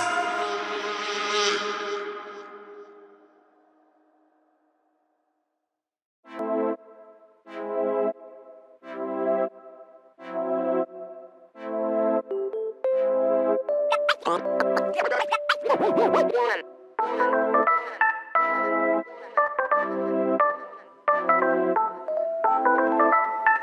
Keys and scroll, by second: 3.1 space, 5.3 m, 8.8 shift+space, 12.3 s, 14.3 space, 15.0 shift+s, 16.6 shift+s, 18.3 s, 20.1 Escape, 22.1 space.